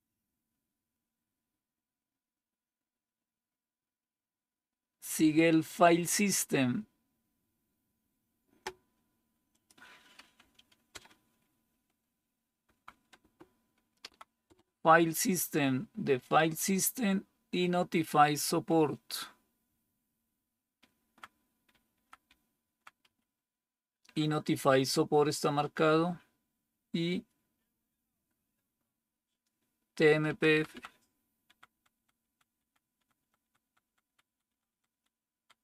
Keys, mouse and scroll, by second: 10.3 Right, 10.8 Return, 12.5 Right, 13.0 Return, 13.9 Down, 14.3 Return, 19.5 Down, 20.2 Down, 20.3-20.8 Down, 21.5 Down, 21.8 Down, 22.1 Down, 22.9 Up, 30.1 Down, 30.4 Down, 30.5 Down, 31.3 Down, 31.6 Down, 31.8 Down, 32.1 Down, 32.4 Down, 32.8 Down, 33.0 Down, 33.3 Down, 33.5 Down, 33.7 Down, 34.1 Down.